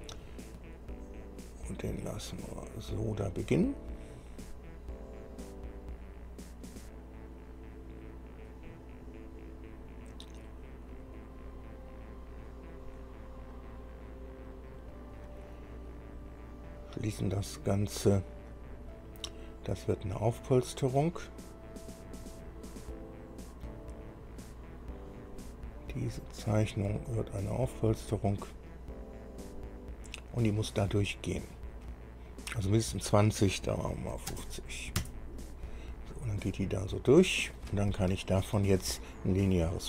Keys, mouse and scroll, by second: 1.5-4.4 drag, 9.3-9.7 scroll up 2, 11.4-15.1 drag, 16.9 click, 18.9-19.3 scroll up 1, 19.5-24.0 middle drag, 26.1 scroll down 1, 26.7 click, 27.8 click, 28.9-31.3 middle drag, 32.5 click, 34.3 KP_5, 34.5 KP_0, 35.2 KP_Enter, 37.2 click, 38.2 shift+click.